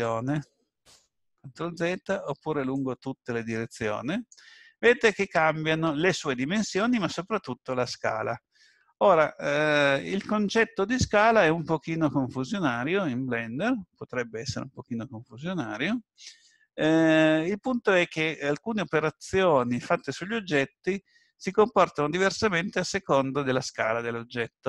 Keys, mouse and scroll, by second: 1.6 ctrl+z, 2.7 click, 13.9-14.8 scroll down 2, 14.8-15.5 scroll up 2, 15.5-15.8 scroll down 1, 16.3-17.1 scroll up 1.